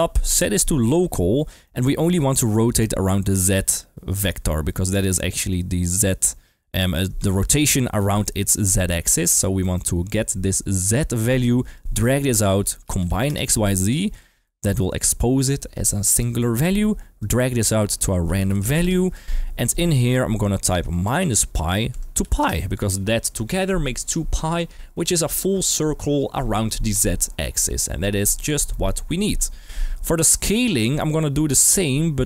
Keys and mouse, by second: 0.3 g, 0.5 click, 0.9 click, 1.3 middle click, 2.0-3.7 drag, 4.2 ctrl+z, 4.6-5.1 middle drag, 6.7 middle click, 7.2 shift+middle click, 8.2-8.5 middle drag, 9.6 middle click, 11.7 drag, 14.1 click, 14.4 middle click, 16.5 middle click, 17.1 click, 19.7 click, 20.3-22.4 drag, 28.0 middle click, 28.7 middle click, 29.4 g, 29.9 click, 30.2 middle click, 30.9 click, 31.6-32.2 drag.